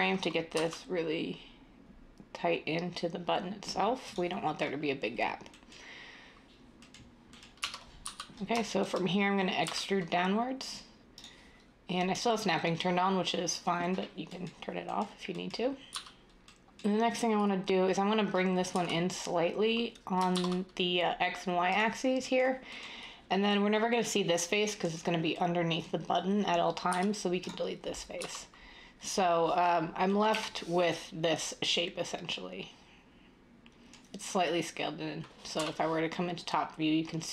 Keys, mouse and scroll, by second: 0.4 s, 7.5-8.2 typing, 9.6 e, 15.8 z, 17.5 z, 18.7 s, 20.3 z, 26.9 x, 28.2 z, 30.3 \, 35.6 7.